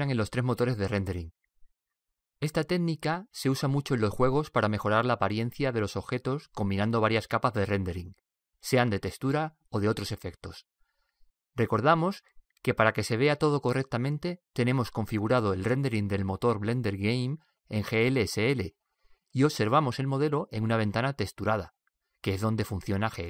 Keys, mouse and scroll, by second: 16.5-21.1 drag, 21.8 click.